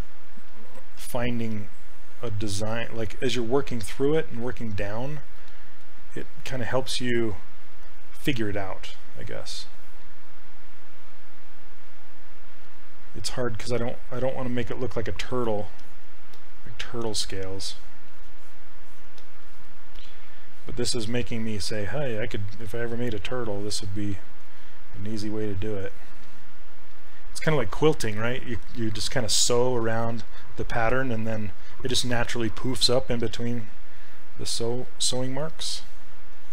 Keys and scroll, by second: 1.0 s.